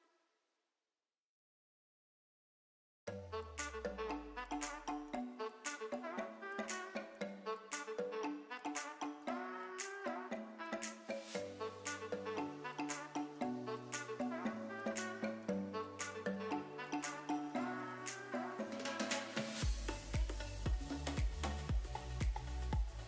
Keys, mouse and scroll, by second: 1.6-3.4 drag, 4.9-5.3 middle drag, 6.7-7.4 drag, 7.8-8.3 drag, 8.9 click, 11.4-11.8 drag, 13.4 shift+a, 19.6 click.